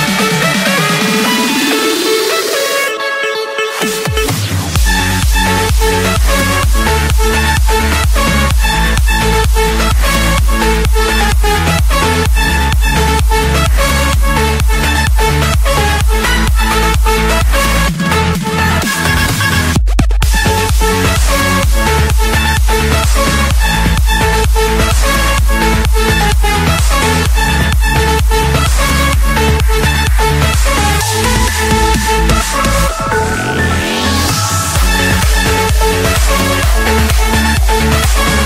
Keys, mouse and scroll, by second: 0.8 click, 1.1-1.9 scroll, 1.9 Escape, 2.4 right click, 3.7 click, 6.3 click, 8.1 click, 9.7 click, 10.4 click, 10.9-12.4 scroll, 12.4 Escape, 13.5 click, 15.5-16.2 scroll, 16.2-17.0 scroll, 17.0-18.2 scroll, 18.3-20.8 typing, 21.1 Escape, 22.6 typing, 23.1 Return, 25.0 click, 26.4 click, 26.7-27.1 scroll, 27.1 Escape, 28.3 click, 30.8 click, 34.8 4, 36.7 Return.